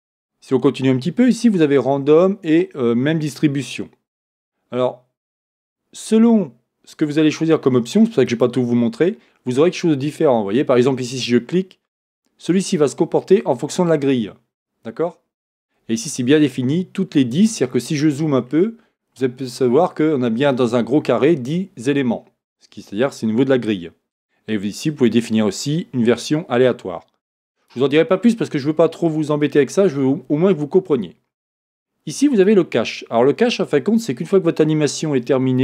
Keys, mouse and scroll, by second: 17.9-19.3 scroll up 1, 25.0 click, 28.1-32.6 drag, 28.1-28.6 scroll down 1, 29.0 scroll up 1, 29.2-29.6 scroll down 1, 29.6 scroll up 1, 32.9-33.6 scroll down 1.